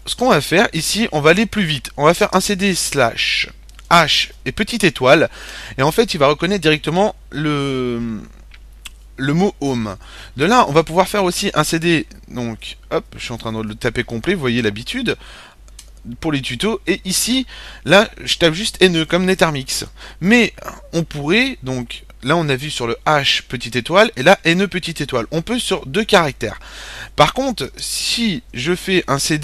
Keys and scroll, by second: 0.0-0.4 typing, 1.5-2.5 typing, 3.7-4.2 typing, 5.4 typing, 9.6-13.4 typing, 15.0 typing, 15.7 Return, 16.0 typing, 18.3 typing, 25.9-26.6 typing, 27.9-29.4 typing.